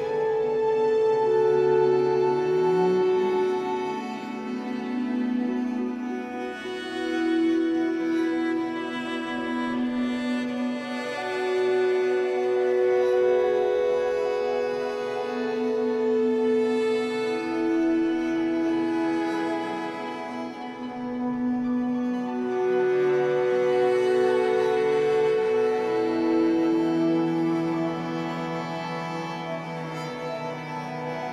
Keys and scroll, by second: 0.1 Escape, 2.0 w, 6.4 Escape, 7.0 3, 7.9 shift+Tab, 8.4 Escape, 12.8 3, 16.6 Escape, 18.4 shift+Tab, 18.8 Escape, 22.4 b, 25.6 Escape, 27.3 Escape, 27.5 3, 28.2 shift+Tab, 28.6 Escape, 29.4 3.